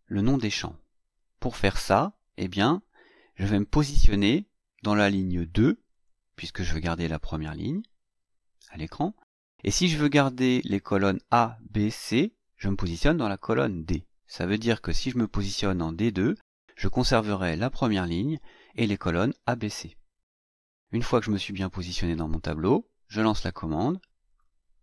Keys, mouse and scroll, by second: 5.9 click, 15.9 click, 21.0 click, 23.6 click.